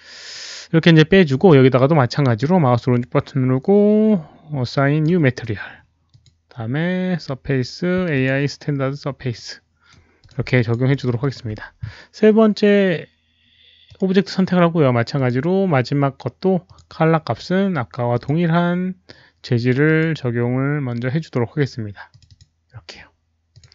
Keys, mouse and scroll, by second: 0.8 alt+z, 1.0 alt+z, 2.2-5.0 right drag, 6.0 ctrl+click, 7.2 alt+click, 7.2 right click, 8.1 alt+click, 9.3 right click, 10.1 click, 10.5 alt+drag, 10.8 alt+middle drag, 10.9 right click, 11.1 alt+click, 11.2 right click, 13.8 alt+click, 15.1 alt+click, 16.6 alt+click, 16.6 alt+middle click, 16.6 right click, 18.1 alt+click, 18.1 alt+middle click, 18.1 right click, 18.2 alt+middle click, 18.2 right click, 18.9 alt+click, 18.9 alt+middle click, 18.9 right click, 19.8 alt+click, 19.8 alt+middle click, 19.8 right click, 22.0 click, 22.2 click, 23.5 click.